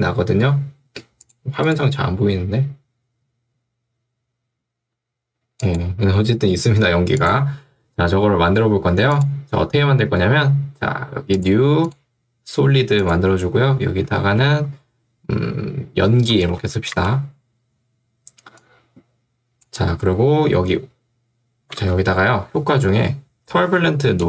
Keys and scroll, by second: 14.2 d, 14.6 BackSpace, 15.9-17.1 typing, 21.8 ctrl+space, 23.9 y.